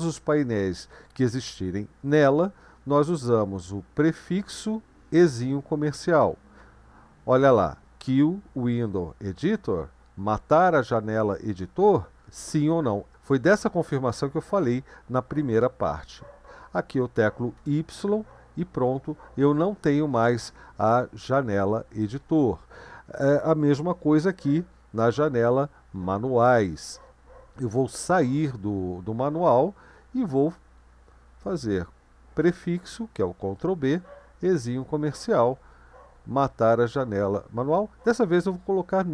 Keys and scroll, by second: 4.4 ctrl+b, 5.1 shift+7, 17.3-18.1 typing, 28.1 q, 32.4 ctrl+b, 34.6 &, 38.2-38.9 typing.